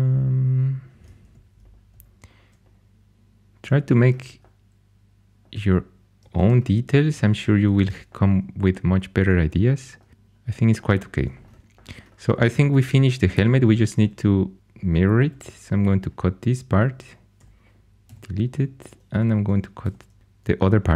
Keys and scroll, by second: 1.1 2, 6.3 shift+super+e, 6.9 shift+super+e, 8.0 shift+super+e, 13.7 shift+a, 15.1 c, 17.3 4, 18.0 x, 19.0 2, 19.7 x, 20.2 super+z.